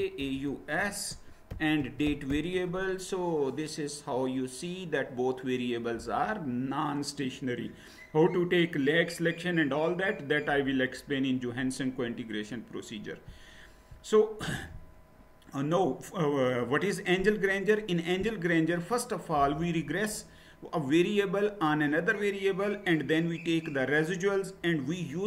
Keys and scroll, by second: 0.0-2.8 typing.